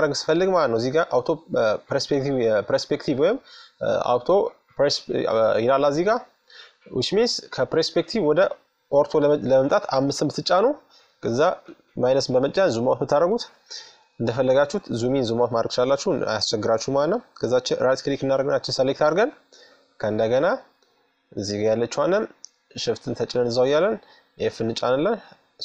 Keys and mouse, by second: 0.7-2.7 drag, 6.3-7.6 middle drag, 7.6-9.1 drag, 8.5 KP_5, 9.4 click, 9.7 KP_Subtract, 13.4-14.8 middle drag, 15.6 middle click, 17.2-18.9 right drag, 21.0 middle click, 22.1-23.8 right drag, 22.9 f, 24.5-25.6 right drag, 25.2-25.6 middle drag.